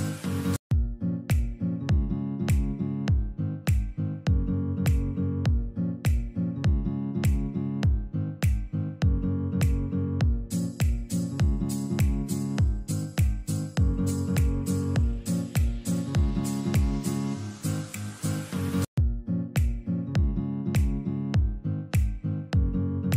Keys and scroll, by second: 0.5 shift+Page_Up, 1.6 alt+c, 3.7 ctrl+z, 7.1 shift+Page_Up, 20.0 1, 20.2 0.